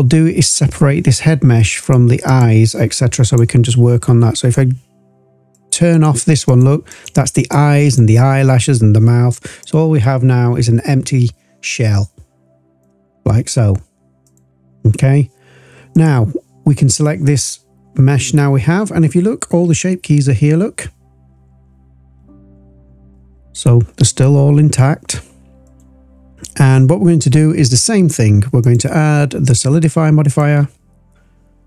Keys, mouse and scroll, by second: 1.8-2.5 drag, 3.2 click, 4.3 click, 5.5 click, 5.9 click, 6.4 click, 6.8 click, 7.3 click, 7.8-12.8 drag, 12.8-14.2 middle drag, 13.1-14.2 scroll down 2, 14.2 click, 15.9 click, 19.2-20.2 scroll down 2, 20.2-20.8 scroll down 1, 20.8 scroll down 1, 22.1-23.2 scroll down 5, 23.2-24.7 scroll up 10, 25.6 click, 28.6-30.4 drag.